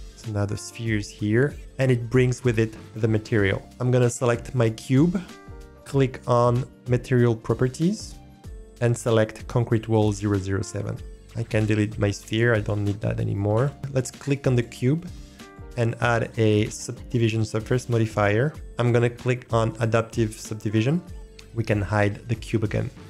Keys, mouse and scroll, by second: 0.4 click, 3.6 click, 8.4-11.1 drag, 11.2-11.5 scroll down 4, 11.5 click, 13.6 Delete, 14.5 click, 15.5-17.5 drag, 18.6 click, 21.0 click, 21.2 Delete, 22.9 click.